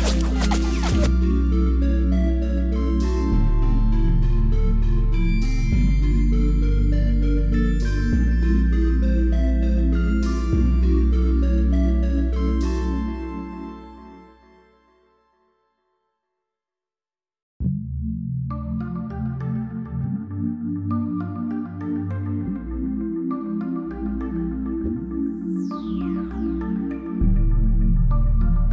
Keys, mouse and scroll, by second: 2.2 click, 6.4 click, 10.3 shift+a, 11.3 shift+c, 11.4 click, 20.0-21.3 typing, 21.6 click, 22.9-24.3 typing, 24.6 click, 25.5 space.